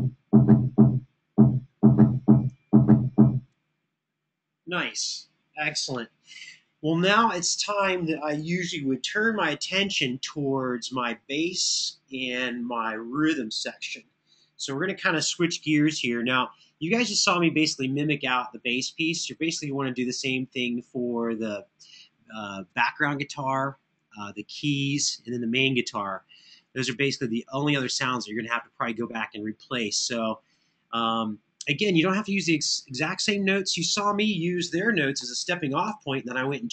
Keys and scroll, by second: 34.9 Left, 35.6 Right.